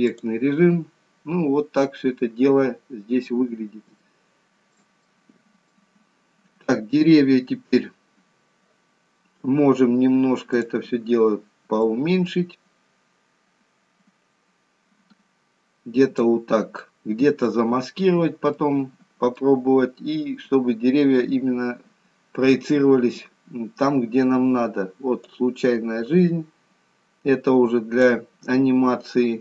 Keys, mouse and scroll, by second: 2.2 scroll down 2, 3.0-4.0 scroll up 2, 4.2 shift+middle click, 5.1 middle click, 10.7 click, 11.9 click, 18.3 scroll up 2, 18.7 middle click, 19.6-20.5 scroll down 2, 20.5-21.2 scroll down 1, 21.2-21.6 scroll up 1, 22.5 scroll down 1, 25.4 click, 28.9-29.4 scroll down 1.